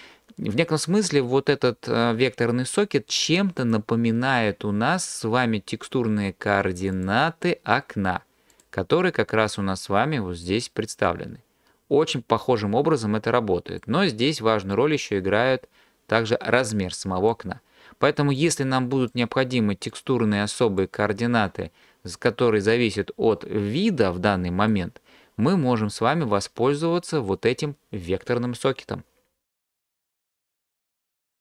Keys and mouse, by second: 3.6-7.1 drag, 12.2-15.9 drag, 18.7 right click, 19.9 drag.